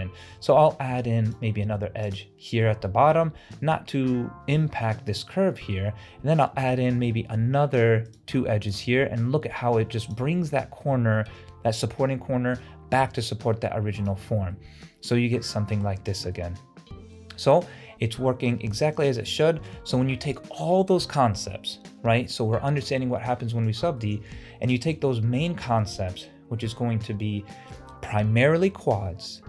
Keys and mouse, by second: 0.3 ctrl+r, 2.7 middle click, 5.4 middle click, 6.7 ctrl+r, 8.9 middle click, 10.5 middle click, 13.1 Tab, 14.3 ctrl+alt+z, 14.6-15.8 middle drag, 15.9 ctrl+alt+z, 16.4-17.8 middle drag, 18.2-18.5 middle drag, 18.8 shift+middle click, 19.8 shift+middle click, 24.0 shift+middle drag, 24.8 shift+middle drag.